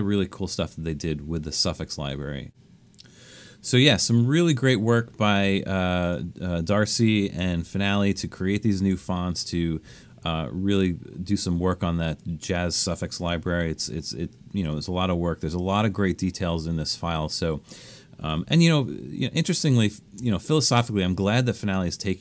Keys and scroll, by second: 5.4 BackSpace, 7.6 super+-, 8.1 super+-, 8.8 super+-, 13.2 BackSpace, 18.8 super+-, 20.0 super+-.